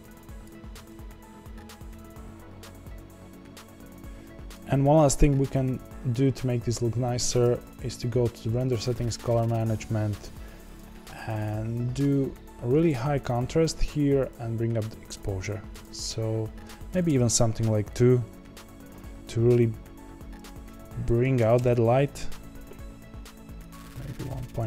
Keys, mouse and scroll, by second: 3.9-12.9 right drag, 12.9-24.6 drag.